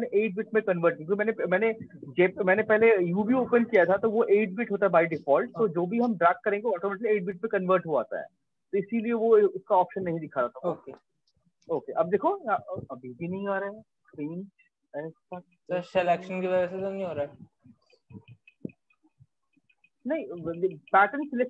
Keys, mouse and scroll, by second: 8.1 click, 8.8 ctrl+click, 9.8 click, 11.2 click, 13.2 click, 15.0 ctrl+d, 16.3 click, 16.9 click.